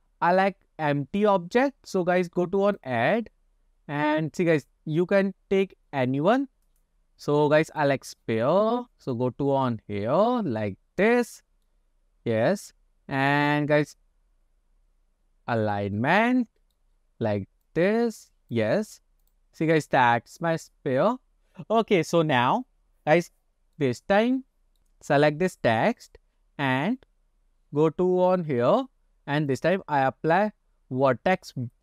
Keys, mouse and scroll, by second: 2.7-7.9 drag, 9.2-11.1 drag, 11.3 scroll down 2, 11.7-12.4 middle drag, 13.1-13.9 scroll up 2, 13.9-15.8 drag, 16.0-16.8 middle drag, 17.7 click, 18.0 click, 19.3 click, 23.9-24.8 middle drag, 26.0 click, 28.4 click, 29.6-31.8 drag.